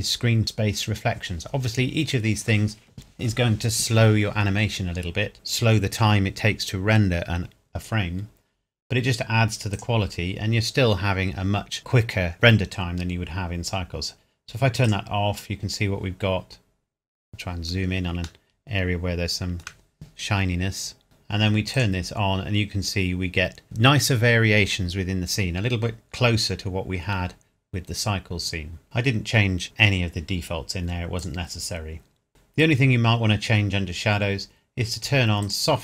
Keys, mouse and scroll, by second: 0.4 click, 9.8 click, 14.8 click, 16.6 scroll up 1, 17.2-18.1 scroll down 1, 18.4 shift+middle click, 21.7 click, 27.4 scroll down 1, 31.2 click, 35.4 click.